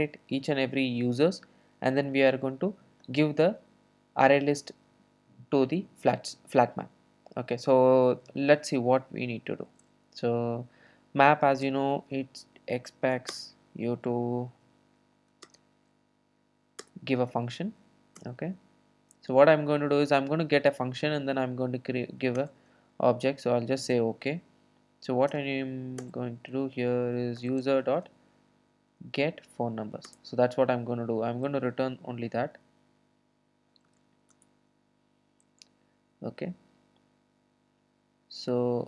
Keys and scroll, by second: 16.0 ctrl+space, 17.3 Return, 27.4 Return, 34.4 Return, 37.1 super+x.